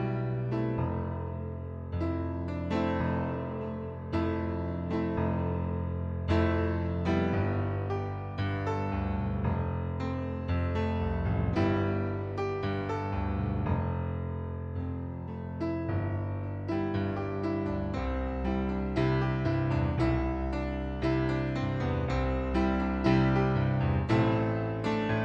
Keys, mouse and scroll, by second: 1.8 click, 3.1 click, 4.0 middle click, 4.8 click, 5.9 click, 6.6 middle click, 7.6 click, 8.8 ctrl+z, 9.6 ctrl+d, 10.2 click, 15.4 shift+click, 16.5 ctrl+d, 18.9 click, 20.8 click.